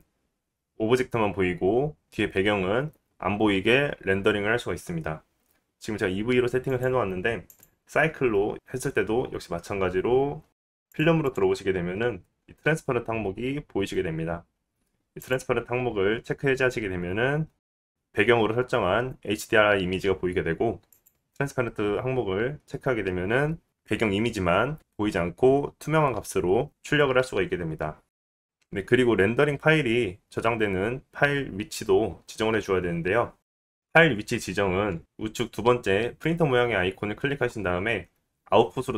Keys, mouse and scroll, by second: 1.2 click, 1.3-8.8 middle drag, 8.8-17.6 drag, 13.7 scroll down 2, 17.6-23.0 middle drag, 23.0 click, 23.2-30.0 middle drag, 30.0 click, 30.1-36.4 middle drag, 36.4 click, 36.6-38.9 middle drag.